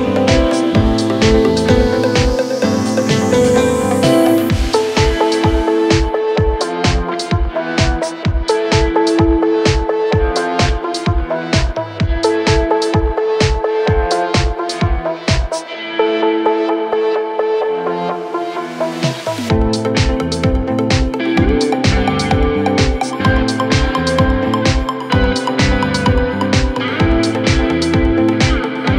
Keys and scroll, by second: 10.9 ctrl+v, 18.0 ctrl+Page_Down.